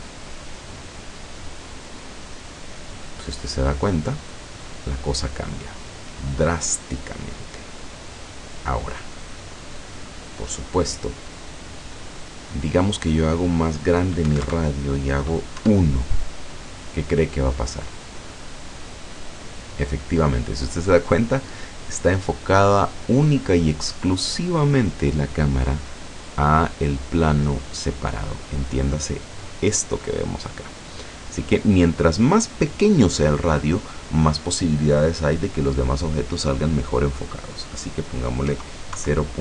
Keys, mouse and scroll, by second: 12.3 click, 14.3 KP_1, 14.5 KP_Enter, 15.6 F12, 31.3 click, 38.5 KP_0, 39.0 KP_Decimal.